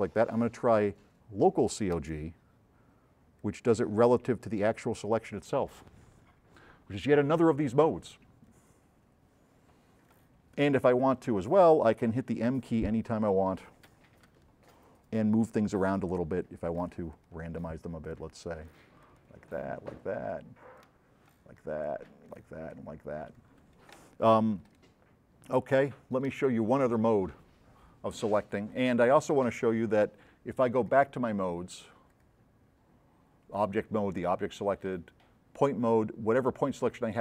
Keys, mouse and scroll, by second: 2.0 click, 3.4 click, 6.2 click, 11.4 middle click, 11.6 middle click, 11.9 scroll up 2, 12.6-13.1 scroll up 4, 13.7 middle click, 14.3 m, 15.3 click, 16.3 click, 17.2 click, 18.1 click, 19.1 click, 20.8 click, 21.8 click, 22.7 click, 24.3 s, 24.7 right click, 31.0 click, 32.3 drag, 35.0 click.